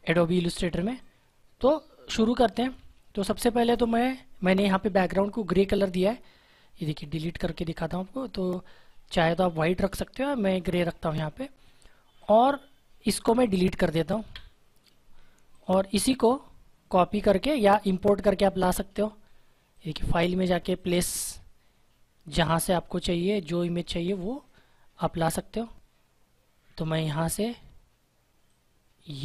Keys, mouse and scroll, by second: 0.3 space, 1.2 space, 5.1 scroll up 1, 5.8 click, 10.3 click, 10.5 ctrl+z, 12.1 click, 19.6 click, 22.5 scroll down 1, 24.1 click, 28.4 click.